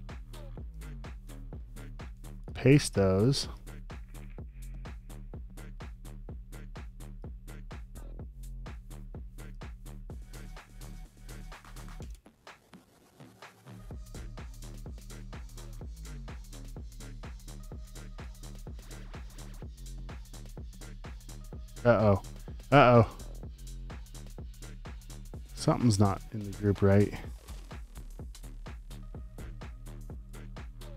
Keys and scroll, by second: 1.2 super+v, 12.0 v, 14.7 shift+super+r, 15.3-18.7 typing, 17.4 shift+super+r, 19.5 shift+Right, 23.1 super+z.